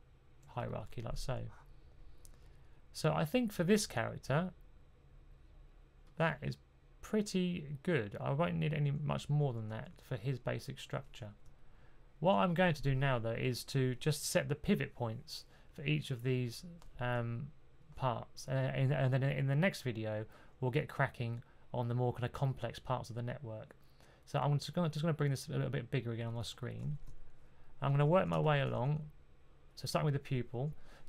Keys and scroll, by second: 26.8 typing, 27.9-28.6 typing.